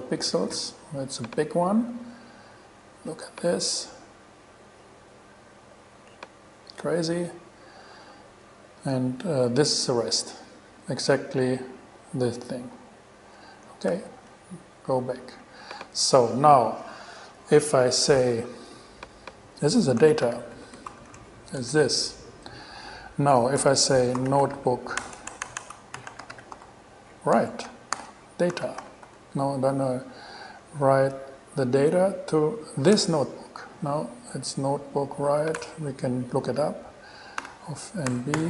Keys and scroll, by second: 14.1 shift+super+e, 20.0-21.7 typing, 21.8 shift+Return, 24.1-27.2 typing, 27.6 Return, 28.2 alt+g, 28.6-29.8 typing, 33.2 shift+Return, 35.8 BackSpace, 37.6 alt+5, 38.3 alt+n.